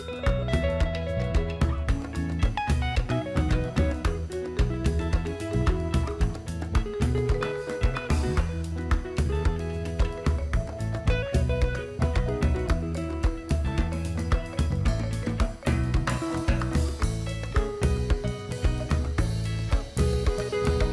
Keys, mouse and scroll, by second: 0.0-0.5 alt+scroll up 1, 0.5-1.0 scroll down 2, 1.4 click, 1.8 right click, 2.3-5.2 drag, 5.1 scroll up 1, 6.5-8.9 shift+drag, 8.9 click, 10.3 click, 10.6 alt+scroll down 1, 11.6 alt+scroll up 1, 11.9 click, 12.3 Left, 13.1 Down, 14.0 Down, 15.0 click, 16.3 alt+scroll up 1, 16.5 alt+scroll down 1, 17.1-19.2 drag.